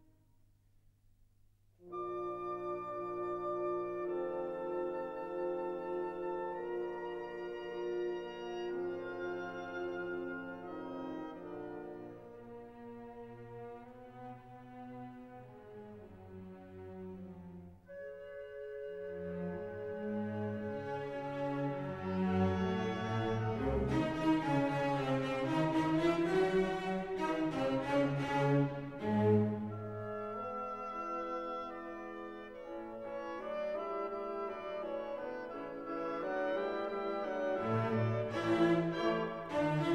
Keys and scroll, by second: 0.6 ctrl+alt+z, 21.2 ctrl+t, 26.6 Return, 29.4 ctrl+t, 32.6 Return, 33.1 Up, 35.0 ctrl+t, 39.6 Up.